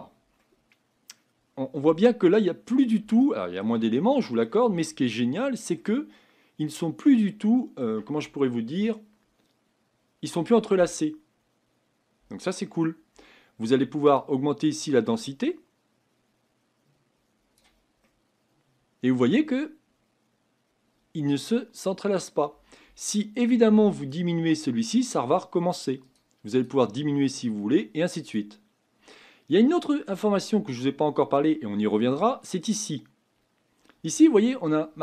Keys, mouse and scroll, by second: 0.0-0.4 scroll up 4, 0.4-4.7 middle drag, 4.7-5.1 scroll down 3, 5.1-14.7 shift+middle drag, 14.7-17.2 drag, 18.0-21.0 middle drag, 24.1-35.0 drag.